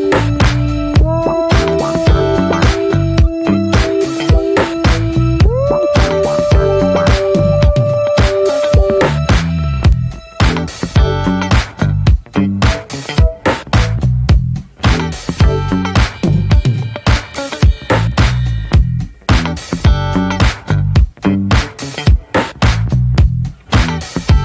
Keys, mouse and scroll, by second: 0.6 middle click, 0.9-2.1 drag, 2.1 middle click, 2.4-3.6 drag, 3.6 middle click, 4.0 click, 4.7 middle click, 4.7 scroll up 1, 4.9 middle click, 5.2 click, 5.9 middle click, 6.2-7.6 drag, 7.6 shift+middle click, 8.1-9.4 drag, 9.4 middle click, 9.8 scroll down 1, 9.9 middle click, 10.0 scroll up 1, 10.2 middle click, 10.5-11.9 drag, 11.9 scroll down 1, 12.0 middle click, 12.1 ctrl+z, 12.3 ctrl+z, 12.4 scroll down 1, 12.6 middle click, 13.1-14.4 alt+middle drag, 14.4 click, 14.5 scroll up 1, 15.1-15.6 scroll up 3, 15.6 shift+middle click, 16.0 f, 18.4-20.5 drag, 20.5-22.4 shift+middle drag, 22.4 click, 22.5 scroll down 1, 22.7-23.1 scroll up 1, 23.1 ctrl+z, 23.3 ctrl+z.